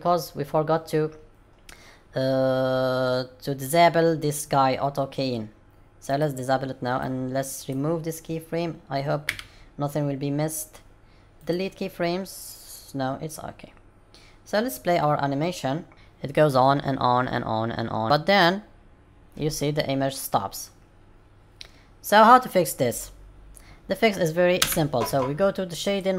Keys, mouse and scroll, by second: 6.0 click, 6.9 click, 9.2 x, 12.7 click, 24.6 space.